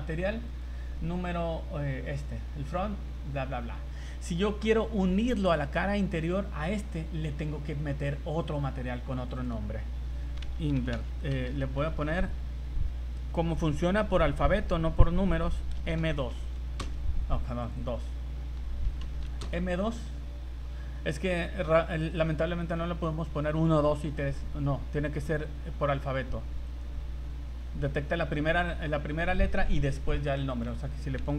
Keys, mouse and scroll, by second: 0.5 click, 2.0 click, 5.4 right click, 8.4 click, 9.2 click, 9.3 click, 11.5 BackSpace, 11.6 BackSpace, 11.9 BackSpace, 12.1 BackSpace, 17.6 click, 17.8 click, 26.7 right click, 30.5 click, 30.6 click.